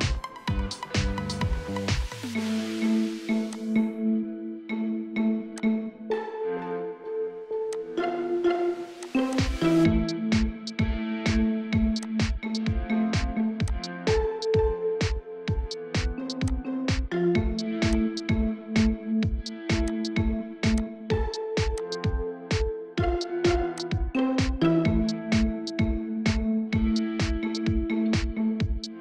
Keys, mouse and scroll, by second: 0.1-0.6 scroll up 1, 2.0 scroll down 1, 2.3 middle click, 9.3 middle click, 10.7 8, 14.7 right click, 25.3 scroll down 1, 25.6 middle click, 26.1 scroll up 1, 26.3 scroll down 1, 26.5-27.0 scroll up 1, 27.0 scroll down 1, 27.2 scroll up 1, 27.3 middle click.